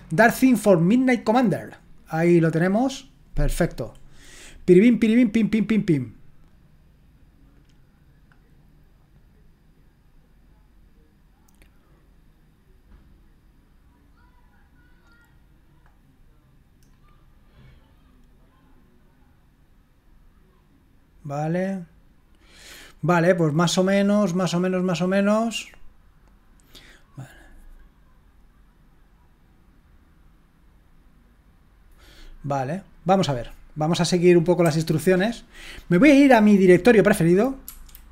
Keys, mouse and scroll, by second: 1.2 click, 16.9-21.9 scroll down 2, 21.9-22.8 scroll down 1, 22.8-23.9 scroll up 2, 23.9-34.2 scroll up 1, 34.2 click, 34.7 q, 37.6 F10.